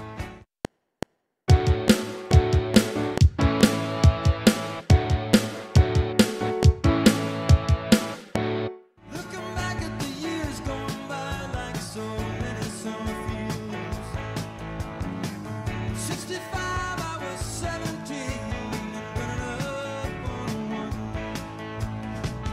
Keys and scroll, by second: 0.2 space, 0.5 F7, 8.6 space.